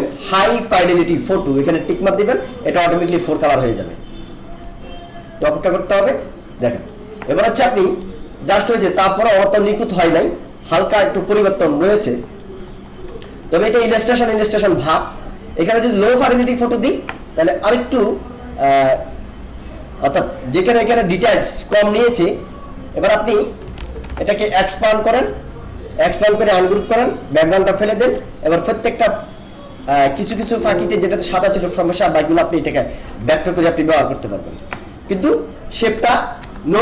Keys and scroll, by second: 23.8 ctrl+-, 28.0 BackSpace, 30.3 alt+space, 35.9 ctrl+z.